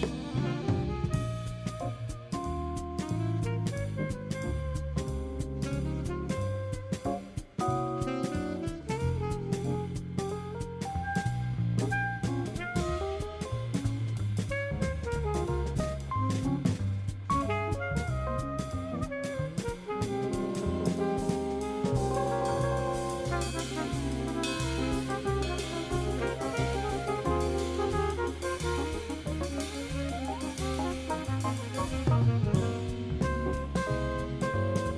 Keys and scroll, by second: 2.8 0, 3.8 5, 4.6 super+space, 21.0 3.